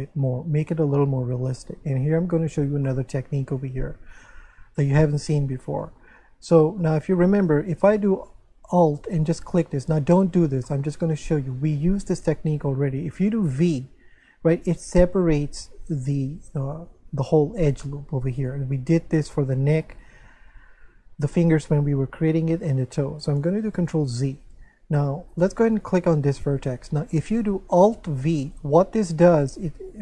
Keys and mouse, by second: 2.5 Tab, 2.9 shift+middle click, 4.8 click, 5.8 middle click, 6.8 shift+middle click, 9.2 alt+right click, 10.7 middle click, 13.5 v, 18.4 right click, 23.9 ctrl+z, 25.7 right click, 28.3 alt+v.